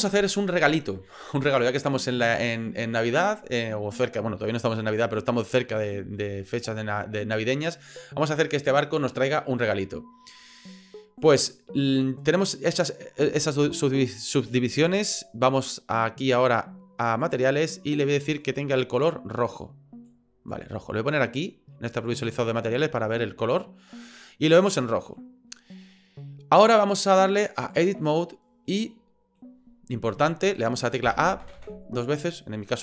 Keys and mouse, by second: 11.3 click, 17.2 click, 18.2 click, 19.5 click, 21.9 click, 23.1 middle click, 24.8 middle click, 26.8-27.8 drag, 28.7 middle click, 31.0 a, 31.4 a, 31.6 a.